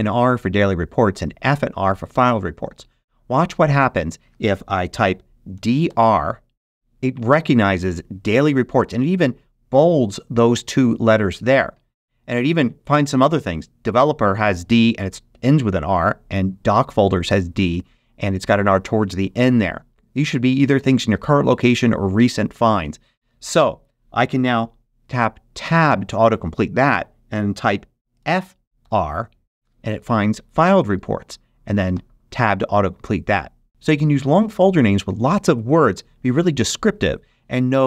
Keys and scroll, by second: 5.5 d, 5.8 r, 25.5 Tab, 28.1 f, 28.7 r, 31.8 Tab.